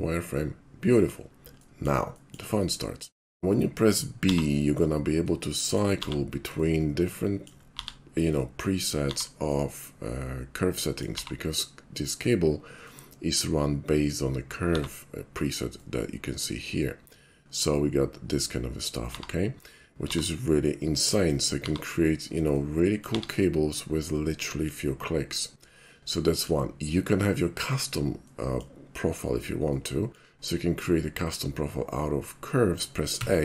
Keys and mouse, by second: 1.6 middle click, 2.2 shift+middle drag, 2.6-3.0 shift+middle drag, 3.3 shift+middle click, 3.5 middle click, 3.6 b, 5.3-5.8 middle drag, 5.8 click, 7.5-8.4 drag, 8.9-9.5 drag, 9.6-11.1 middle drag, 12.9-13.4 middle drag, 14.8 b, 15.8-18.9 middle drag, 19.1 b, 20.8-21.3 middle drag, 22.6 middle click, 24.2-24.7 middle drag, 25.9-26.5 middle drag, 28.3-28.6 shift+middle drag, 29.7-30.2 middle drag, 32.5 shift+middle click, 33.2 a.